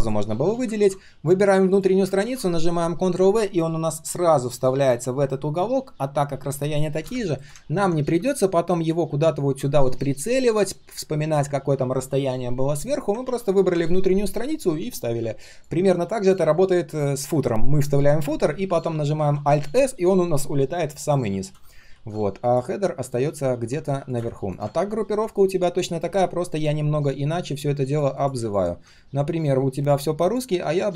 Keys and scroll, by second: 0.7 ctrl+c, 2.2 ctrl+v, 13.2 ctrl+z, 19.1 alt+s, 21.9 ctrl+z.